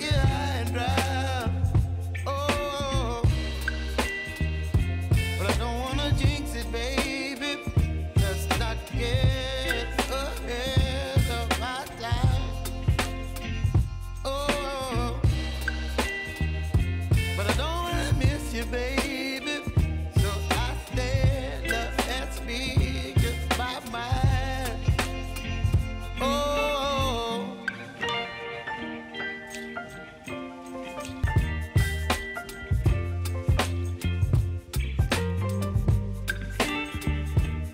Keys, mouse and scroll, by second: 0.2 u, 1.6 click, 3.2 ctrl+a, 4.1 ctrl+shift+c, 5.2 shift+b, 6.4 g, 6.6 Return, 9.0 click, 14.4 ctrl+n, 17.9 ctrl+n, 18.0 ctrl+a, 18.6-20.1 typing, 21.5-25.3 drag, 26.4 Return, 27.8 click, 30.6-35.5 drag.